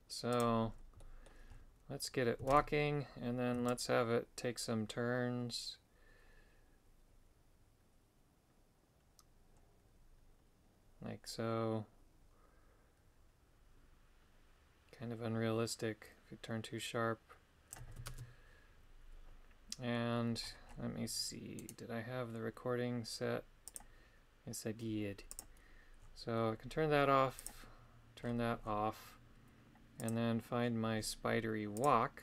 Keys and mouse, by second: 1.0 middle click, 2.5 shift+space, 3.7-17.8 shift+drag, 18.1 shift+space, 21.6 right click, 25.3 click, 27.4 click, 30.0-31.9 drag.